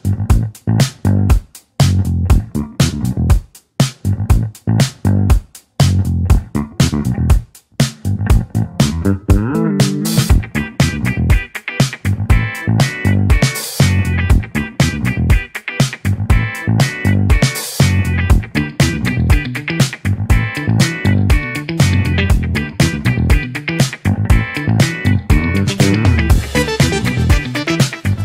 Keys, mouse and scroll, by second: 5.3-8.1 middle drag, 8.1-10.2 drag, 10.2-13.7 middle drag, 13.7-17.7 drag, 18.2-18.6 scroll up 1, 18.6-21.0 middle drag, 21.0 scroll up 1, 25.1 click, 25.8-27.6 middle drag, 27.6-28.2 drag.